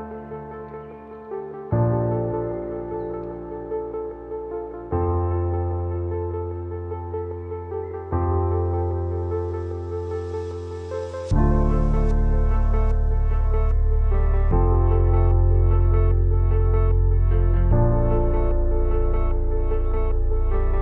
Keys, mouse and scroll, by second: 8.3 Up, 11.5 click.